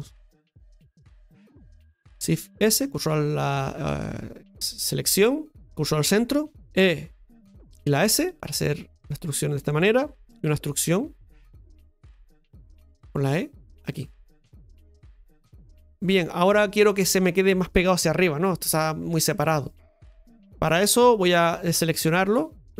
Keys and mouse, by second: 0.5 ctrl+KP_Add, 5.6 middle click, 15.1-16.1 middle drag, 21.7 middle click, 22.5 right click.